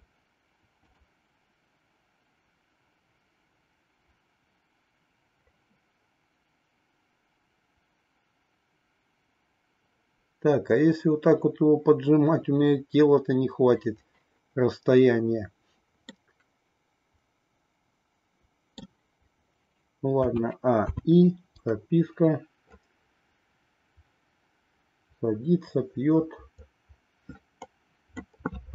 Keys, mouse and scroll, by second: 16.1-18.8 middle drag, 20.3 a, 21.0 i, 22.8-28.3 drag.